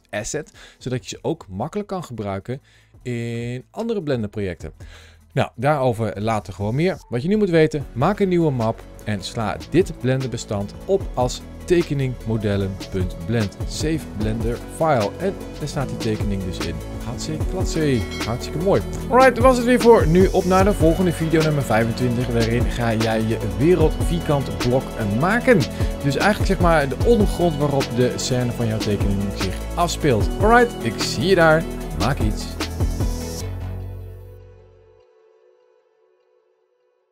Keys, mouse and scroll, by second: 14.4 middle click.